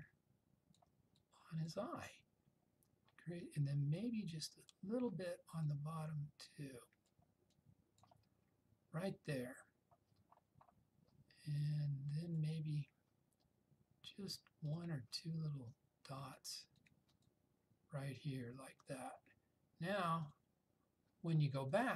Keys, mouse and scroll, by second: 5.8-7.3 drag, 11.7-12.6 drag.